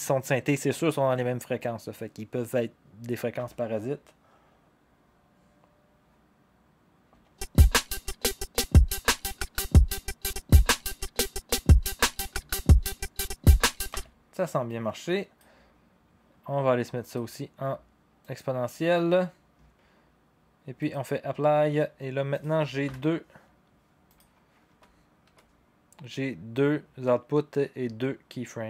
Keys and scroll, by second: 3.3 0, 7.1 0, 13.9 0, 22.8 y, 24.6 u, 25.2 u.